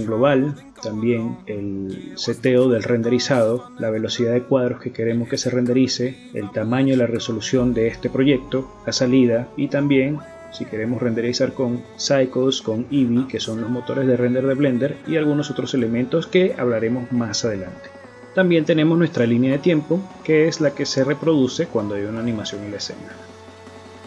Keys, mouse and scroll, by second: 1.4 click, 1.9 click, 2.7 scroll up 5, 4.1 click, 8.0 click, 8.7 click, 9.9 click, 11.5 click, 11.9 click, 12.6 click, 14.1 click, 15.5 click, 16.2 click, 16.7 click, 17.1 click, 17.4 click, 17.7 click, 18.5 click.